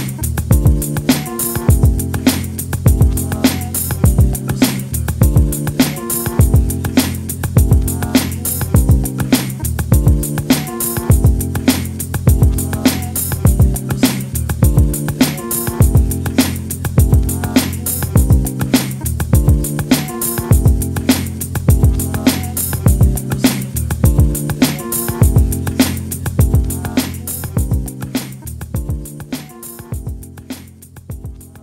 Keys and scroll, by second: 20.1 Right, 20.3 Right, 20.5 Right, 20.8 Right, 31.5 e.